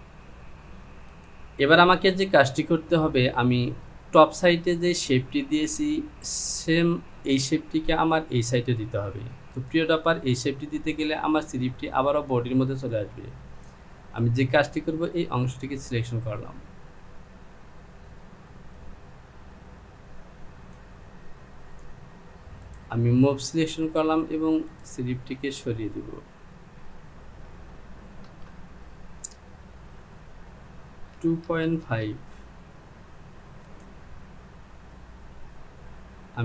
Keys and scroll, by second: 27.1 Down, 31.2 KP_2.